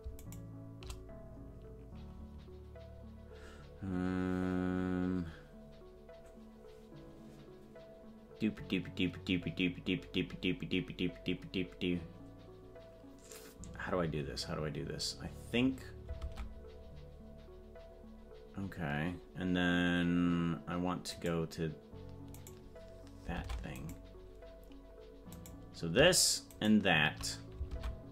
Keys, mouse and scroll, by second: 0.3 right click, 23.3 ctrl+Tab, 23.9 right click, 25.5 right click, 26.6 shift+right click, 27.6 ctrl+Tab.